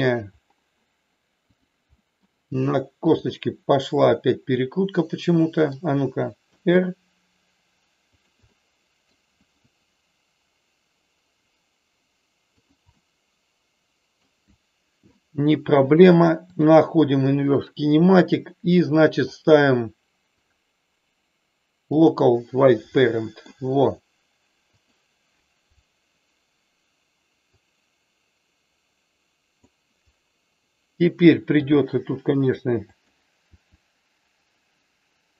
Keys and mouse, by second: 1.5 click, 1.9 middle click, 3.0 click, 4.0-5.6 middle drag, 6.5 r, 8.5 middle click, 9.3 r, 12.5 click, 12.9-14.1 middle drag, 16.5 click, 18.1 click, 20.5-22.1 drag, 23.0 middle click, 24.8 click, 27.5-29.6 drag, 31.6 r, 32.9 click, 33.5 r.